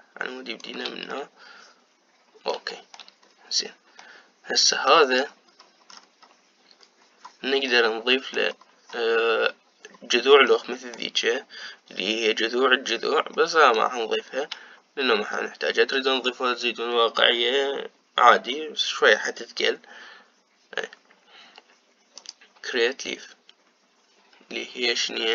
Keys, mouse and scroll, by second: 1.8-3.9 middle drag, 3.9-4.7 scroll up 2, 4.7-6.4 middle drag, 6.4-8.4 scroll down 8, 8.4-9.4 middle drag, 9.4-10.3 scroll down 2, 10.3-11.2 scroll down 1, 11.2-15.0 middle drag, 15.0-16.0 scroll up 3, 16.0 middle click, 17.0-18.1 scroll up 2, 23.2 click.